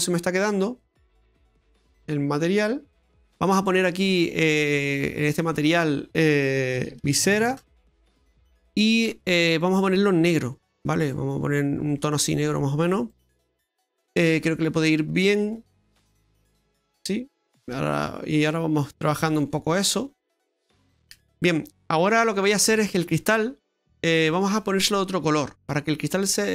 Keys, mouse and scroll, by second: 3.0 middle click, 3.0 scroll down 1, 5.4 click, 5.5 click, 9.5 click, 13.5 scroll up 2, 13.8 middle click, 17.5-18.1 scroll up 2, 18.1-19.1 scroll down 2, 18.5 middle click, 20.2-20.6 scroll down 4, 20.6 middle click, 21.6-22.1 scroll up 4, 22.1 middle click, 22.7 shift+middle click, 23.2 middle click, 25.4 middle click, 25.9-26.5 scroll up 4.